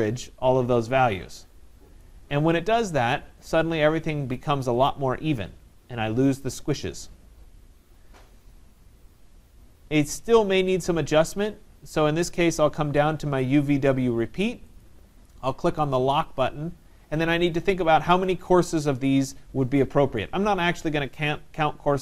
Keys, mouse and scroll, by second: 1.4 click, 6.4-11.6 right drag, 14.9-20.0 drag.